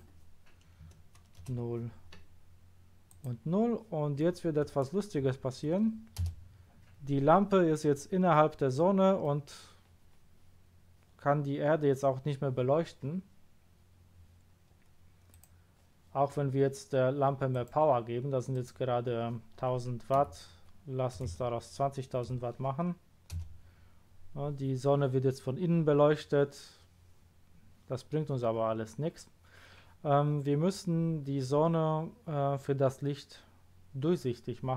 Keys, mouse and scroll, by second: 0.8 KP_0, 1.4 Return, 3.0 click, 5.2 KP_0, 6.2 Return, 8.6-9.2 middle drag, 15.3 click, 17.5 click, 18.5 click, 20.2 Right, 21.3 2, 22.3 0, 23.3 Return.